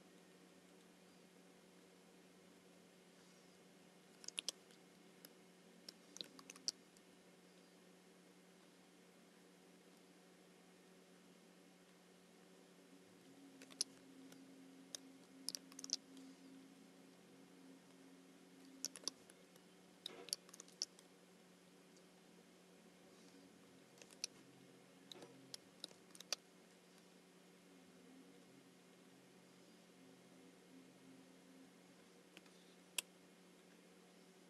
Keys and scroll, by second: 4.4 super+c, 6.5 alt+super+b, 14.0 super+c, 15.8 alt+super+b, 19.0 super+c, 20.5 alt+super+b, 24.1 super+c, 26.1 alt+super+b, 32.4 space.